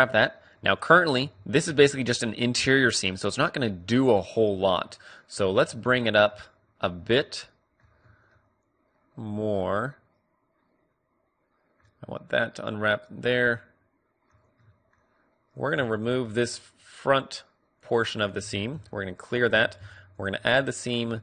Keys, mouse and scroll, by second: 1.1 a, 1.6 a, 4.0 middle click, 5.4 a, 7.3-10.0 middle drag, 13.3-15.5 middle drag, 15.5 click, 16.4-19.5 right drag, 18.5 ctrl+e, 19.5 a, 20.4-21.2 middle drag.